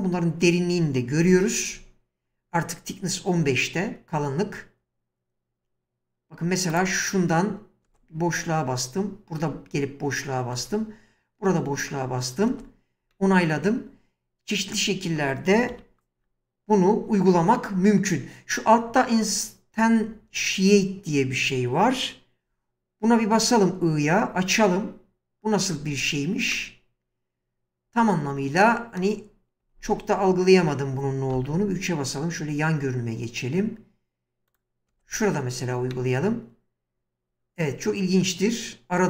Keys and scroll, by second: 1.2 1, 4.8 w, 7.9 space, 15.8 1, 23.4 i, 25.8 space, 29.6 1, 31.3 3, 34.9 space.